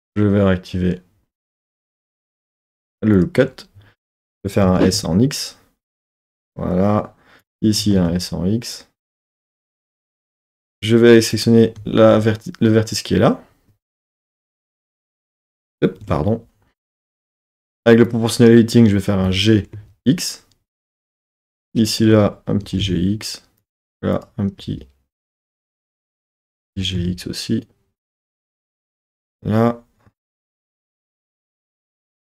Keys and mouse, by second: 0.0-4.6 drag, 4.6 s, 4.9 x, 6.4-7.8 drag, 7.8 s, 8.0 x, 9.4 click, 10.2-11.8 drag, 11.8 z, 14.0 KP_1, 14.3 KP_3, 14.6 KP_1, 16.0 KP_1, 18.0 click, 19.2 g, 19.8 x, 21.0 click, 21.6-22.6 drag, 22.6 g, 22.8 x, 23.6 click, 24.1 click, 24.6 g, 25.6 click, 25.8 super+z, 26.0 click, 26.7 g, 27.0 x, 28.6 click, 28.8 z, 31.4 KP_1, 31.7 KP_3, 31.9 KP_1.